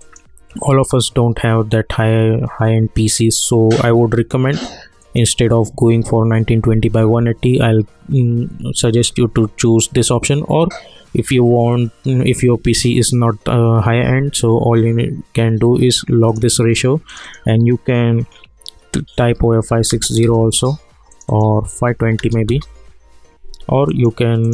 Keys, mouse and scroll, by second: 0.0 click, 5.0 click, 16.3 click, 20.2 Return, 21.1 click, 22.5 Return, 23.9 click.